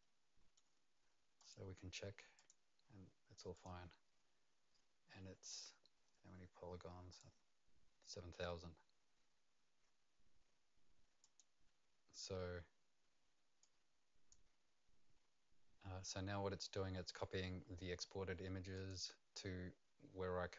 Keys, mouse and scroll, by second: 1.4 right click, 1.4 click, 2.4 right click, 2.4 click, 3.5 click, 7.1 click, 11.2 click, 13.6 click, 18.7 click.